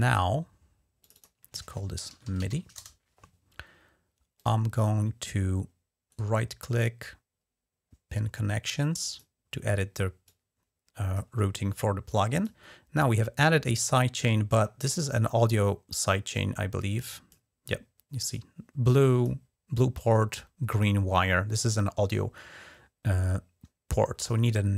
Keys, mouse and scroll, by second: 0.8 click, 1.9-2.3 typing, 2.6 Return, 4.1 click, 5.9 right click, 8.9 click, 10.0 click, 11.9 click, 16.1-17.1 drag, 18.1-19.1 drag, 19.8-20.6 drag, 24.2 right click.